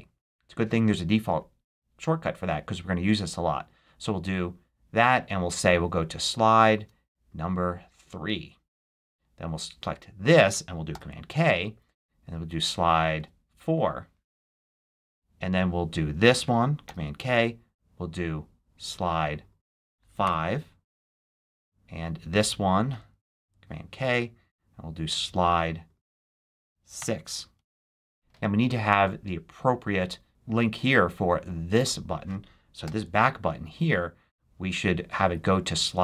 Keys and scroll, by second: 10.8 super+k, 14.5 Return, 16.7 super+k, 20.1 5, 23.2 super+k, 26.9 6, 27.4 Return, 32.7 super+k.